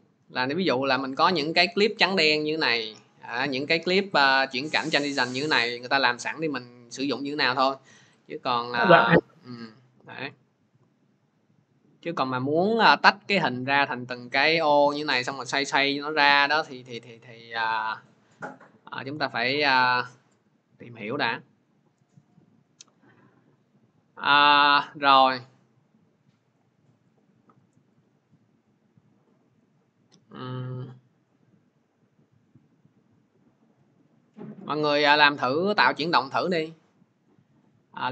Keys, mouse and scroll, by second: 3.1 click, 4.2 click, 6.8 click, 7.0 click, 7.1 click, 7.9 click, 8.1 click, 13.6 click, 14.1 click, 17.0 click, 26.4 click, 27.0 click, 27.7 click, 27.9 click, 29.6 click, 30.0 scroll, 36.2-36.5 scroll, 37.2-37.9 scroll, 38.0 scroll.